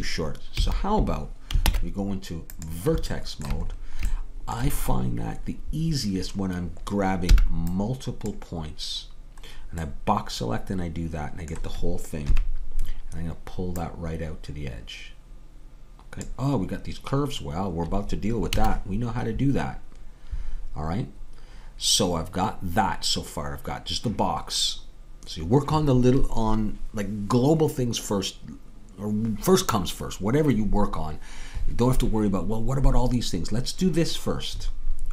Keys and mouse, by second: 0.6 a, 1.7 ctrl+Tab, 7.4 b, 12.3 KP_3, 18.5 a.